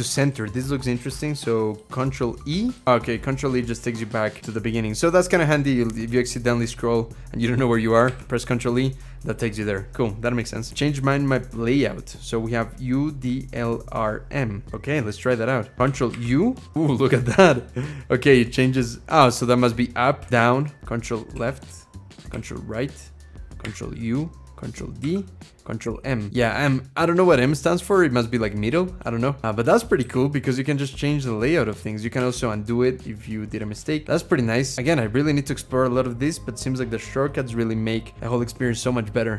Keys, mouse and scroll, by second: 2.8 ctrl+e, 7.9 ctrl+e, 15.9 ctrl+u, 20.2 ctrl+d, 20.3-20.8 scroll down 3, 21.1 ctrl+l, 22.1 ctrl+r, 23.4 ctrl+u, 24.8 ctrl+d, 25.6 ctrl+m, 29.8 ctrl+u, 32.0 ctrl+z.